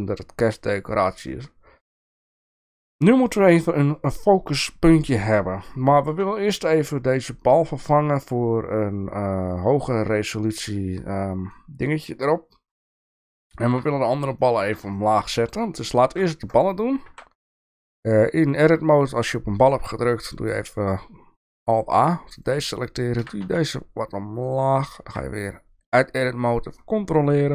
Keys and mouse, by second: 1.4 click, 5.7-6.1 shift+middle drag, 13.2-13.8 shift+middle drag, 14.4 shift+middle drag, 14.9 shift+middle drag, 16.0 shift+middle drag, 16.6 click, 17.1 Tab, 21.4 alt+a, 23.2 g, 25.1 Tab.